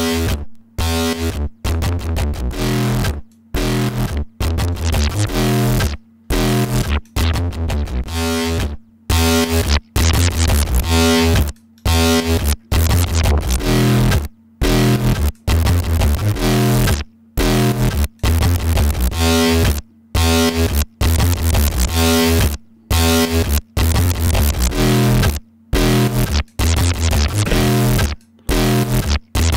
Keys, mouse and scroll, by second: 0.3-1.9 drag, 3.3 click, 4.7 click, 6.8-8.3 scroll up 1, 8.6-11.8 drag, 12.7-15.6 drag, 16.2-18.0 drag, 19.9-20.9 drag, 21.3 click, 23.2-25.3 drag, 25.9 click, 27.0 right click, 27.8 click, 28.8 right click, 29.5 click.